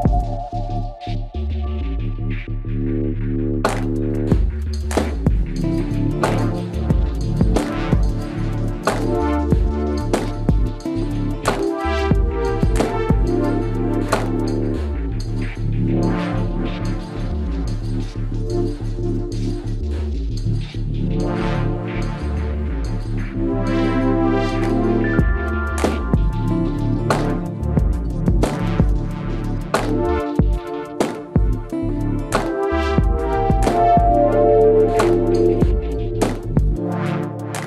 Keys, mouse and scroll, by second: 0.0 ctrl+Tab, 1.9 ctrl+r, 3.3-4.6 drag, 4.0 KP_Decimal, 4.6 middle click, 5.3 g, 6.6 click, 6.8 g, 9.8 right click, 10.1 b, 11.3 right click, 11.4-12.8 drag, 12.8 right click, 12.9 click, 13.2 g, 14.7 g, 16.2 g, 18.6 ctrl+r, 20.3-23.4 drag, 20.5 g, 21.6 g, 23.6-25.5 drag, 23.8 g, 25.5 g, 29.3-32.0 right drag, 29.4 g, 31.0 g, 32.5 g, 33.8 g, 34.8 g, 36.3 g.